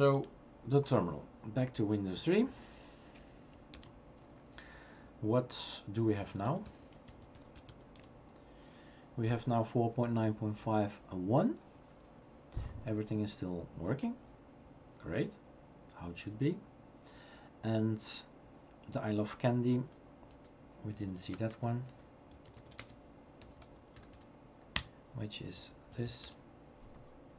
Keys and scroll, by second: 3.7 super+Return, 5.9-9.0 typing, 21.0-27.3 typing, 24.7 Return.